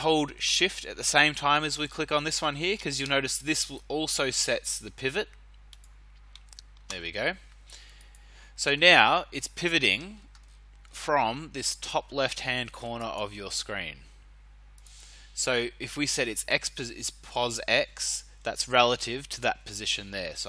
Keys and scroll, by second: 19.4 ctrl+z.